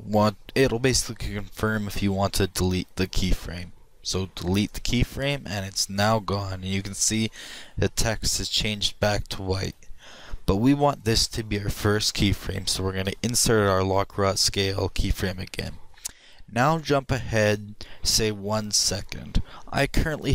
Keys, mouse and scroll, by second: 6.0-7.9 drag, 10.1-12.0 drag, 13.1 i.